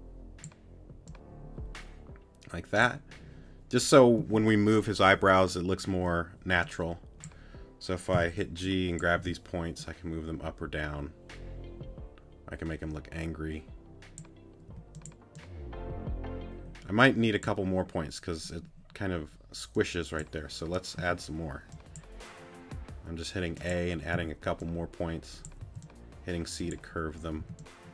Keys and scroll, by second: 8.1 g, 14.7 t, 21.0 a, 24.1 t, 25.6 c, 27.4 t.